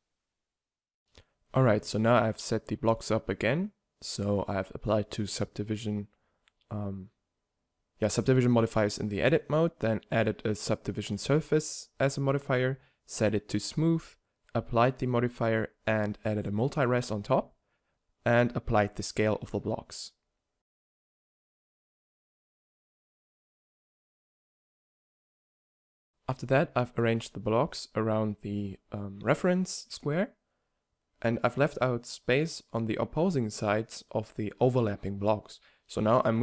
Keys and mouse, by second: 0.0 s, 0.2 a, 1.1-1.7 drag, 1.7 Tab, 1.9 w, 2.6 w, 3.1 Tab, 3.5 Tab, 3.7 w, 4.0 w, 4.5 Tab, 5.7 Tab, 5.9 w, 6.4 w, 6.8 Tab, 7.1 t, 7.7 click, 8.7-10.3 right drag, 11.9-13.8 drag, 13.8 ctrl+2, 14.2-16.1 drag, 14.4 ctrl+2, 15.0 ctrl+2, 21.0-23.1 drag, 21.5-23.1 right drag, 23.5-26.0 drag, 24.1-25.9 right drag, 26.6-27.0 drag, 27.0 middle click, 27.3 ctrl+a, 27.8 ctrl+a, 28.2 ctrl+a, 28.2-36.4 typing, 29.3 click, 30.4 drag, 30.8 click, 33.9-34.4 drag, 34.5-35.1 drag, 35.9 click.